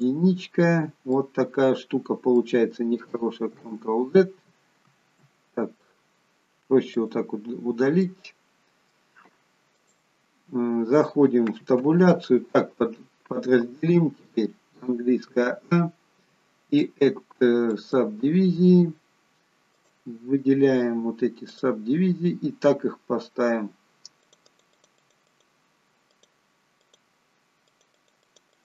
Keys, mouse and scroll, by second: 1.1 middle click, 3.6 ctrl+z, 6.8 click, 7.8 middle click, 9.6 click, 11.8 Tab, 16.7 click, 24.6 click, 24.8 click, 24.9 click, 25.1 click, 25.9 click, 27.6 click, 27.8 click, 28.5 click.